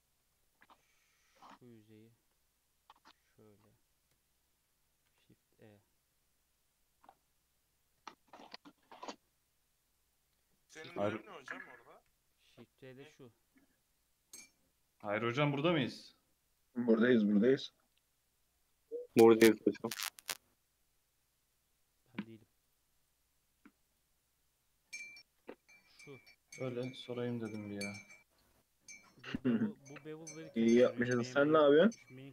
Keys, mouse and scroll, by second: 0.2 2, 0.5 alt+click, 1.3 alt+click, 2.8 click, 5.1 shift+e, 7.8 click, 8.4 shift+e, 9.8 click, 12.1 n, 13.5 click, 14.0 click, 14.4 click, 15.9 click, 16.5 click, 18.6 click, 19.5 click, 22.6 click, 23.0 click, 23.9 click, 28.1-31.2 drag, 32.2-32.3 drag.